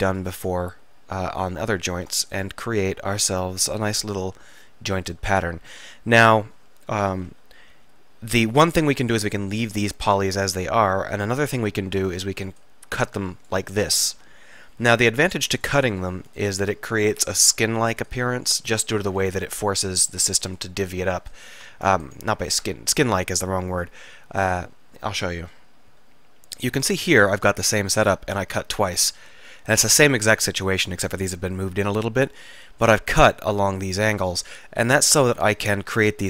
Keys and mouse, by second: 0.9 click, 2.1 ctrl+r, 7.8 k, 8.8 click, 9.4-10.7 middle drag, 10.7 click, 12.1 k, 14.9 k, 18.1 k, 21.3-25.2 middle drag, 25.5 middle click, 28.5 middle click, 34.8 middle click.